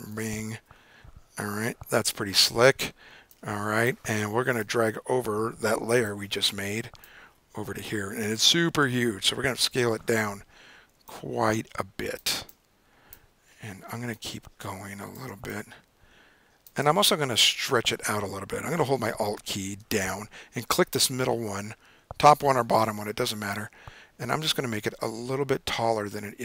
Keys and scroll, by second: 0.3 super+0, 0.6 super+9, 1.7 super+-, 9.0 super+t, 9.5 super+0.